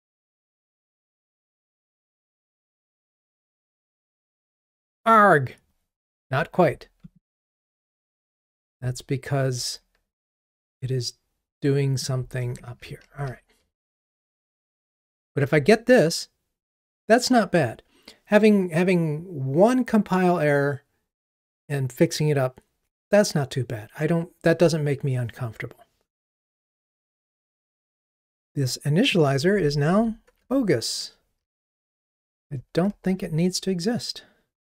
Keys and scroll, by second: 2.0 ctrl+r, 7.2 super+b, 10.4 super+BackSpace, 13.2 ctrl+r, 29.8 alt+Up, 33.1 ctrl+r.